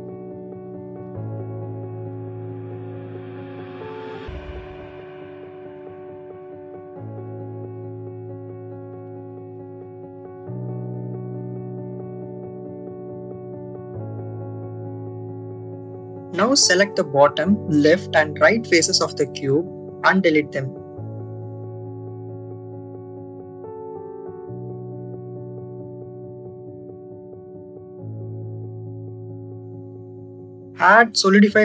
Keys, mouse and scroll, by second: 4.6-5.8 drag, 7.8 z, 8.9 y, 12.5 click, 13.5-16.9 drag, 16.9 3, 18.8 click, 20.0 shift+click, 20.9 click, 23.3 Delete, 26.4-27.4 drag, 28.7 a, 29.5-30.6 drag, 31.4-31.6 drag.